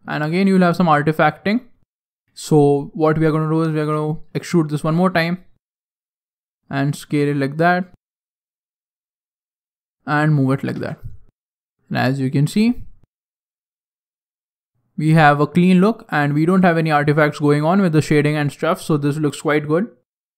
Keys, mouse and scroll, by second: 0.8 ctrl+z, 1.3 ctrl+z, 1.6 middle click, 3.8 e, 4.7 s, 6.6 scroll up 4, 6.8 middle click, 8.4 click, 10.0 scroll down 1, 10.1 scroll down 4, 10.2 middle click, 10.7 Tab, 11.2-11.8 scroll down 2, 11.4 middle click, 12.2 scroll down 2, 12.4 middle click, 13.6 scroll down 1, 13.7 scroll up 1, 13.8 middle click, 15.7 scroll up 1, 15.9 scroll down 1, 16.1 middle click, 17.8 middle click.